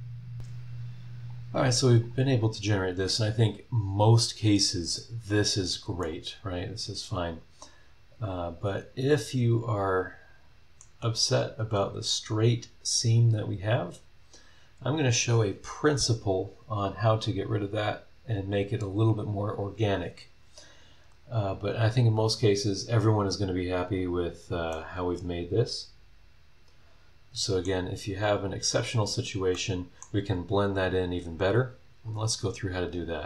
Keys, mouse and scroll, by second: 1.3 click, 6.0 middle click, 6.1-8.8 right drag, 8.8-11.0 right drag, 21.0 click, 21.6 scroll down 1, 22.1-22.6 scroll up 2, 24.0 click, 24.7 middle click, 25.2 click, 25.2-27.8 right drag, 25.8 middle click, 28.5 scroll up 1, 28.9 scroll down 1, 29.5 middle click, 31.5 click, 32.0-32.5 scroll down 1, 33.1 click.